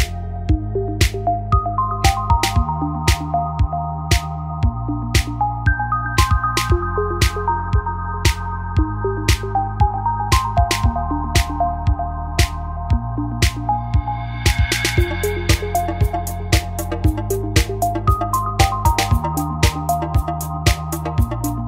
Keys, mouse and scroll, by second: 0.8 s, 3.6 click, 4.4 g, 6.1 click, 6.6-8.3 typing, 9.7 g, 10.4 g, 12.3-14.6 right drag, 12.7 g, 13.4 g, 15.3 click, 15.5-16.8 right drag, 16.1 g, 17.4 a, 19.6-21.6 right drag, 20.1-21.6 typing.